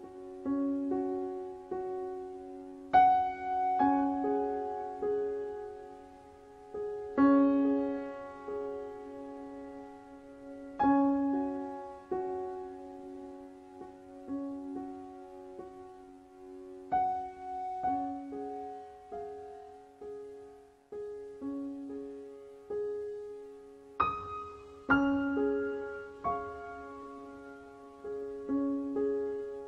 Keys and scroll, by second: 19.9 KP_4, 20.1 KP_5.